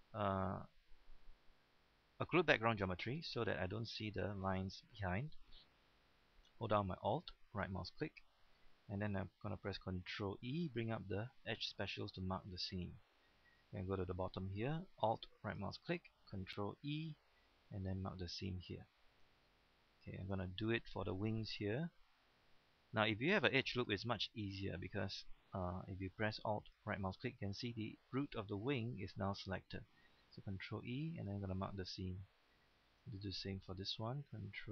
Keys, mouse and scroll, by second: 2.4 click, 3.0 scroll down 1, 3.2 middle click, 4.3-4.6 scroll up 1, 4.6-6.1 middle drag, 7.5 alt+right click, 8.3-8.6 scroll down 1, 8.6 middle click, 10.5 ctrl+e, 12.1 click, 12.5 middle click, 13.3-14.9 scroll up 1, 15.4 alt+right click, 17.0 ctrl+e, 17.8 click, 18.3 scroll down 1, 18.5 middle click, 19.2-19.5 scroll up 1, 19.5 middle click, 20.0 scroll up 1, 20.5 shift+middle click, 20.8-21.2 scroll down 1, 21.2 middle click, 21.8 shift+middle click, 22.6 middle click, 24.4 shift+middle click, 26.6 alt+right click, 27.2-30.3 middle drag, 30.6 ctrl+e, 31.2 click, 31.6 scroll down 1, 31.9 middle click, 32.5 scroll up 1.